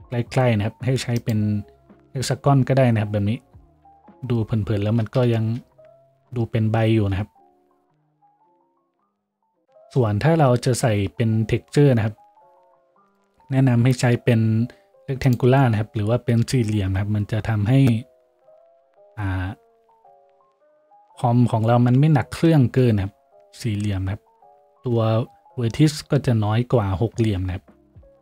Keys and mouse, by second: 5.7 shift+z, 8.8 z, 22.9 shift+z, 27.2 z.